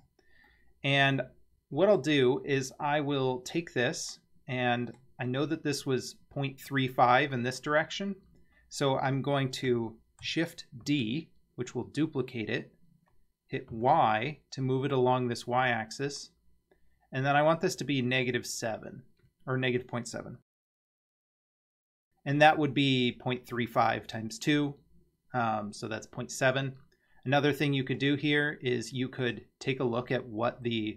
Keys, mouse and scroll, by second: 0.5-2.0 middle drag, 2.2 scroll down 2, 2.3-2.6 scroll up 1, 2.8-3.1 scroll down 1, 3.8-5.0 middle drag, 10.9 shift+d, 28.0 click, 29.3 click.